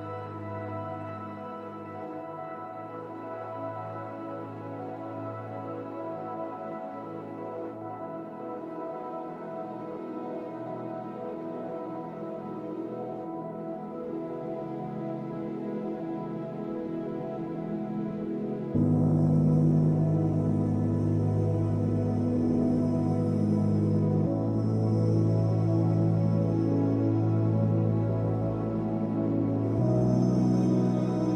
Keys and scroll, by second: 8.2 space, 10.3 space, 10.6 ctrl+z, 13.4 Delete, 14.1 space, 16.5 space, 20.1 space, 21.4 space, 23.3 space, 24.2 space, 28.0 space, 30.5 space.